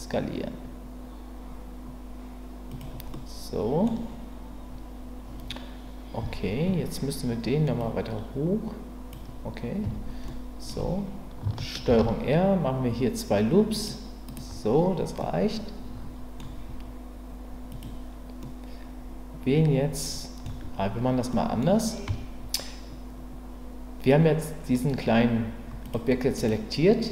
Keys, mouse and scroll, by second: 2.7 click, 3.2 middle click, 6.2 Tab, 7.9-9.1 drag, 9.8 Tab, 10.2 middle click, 11.9 ctrl+r, 15.3-16.4 middle drag, 17.7 click, 18.5-20.5 middle drag, 21.3 middle click, 22.1 Tab, 25.8 click, 26.4 click.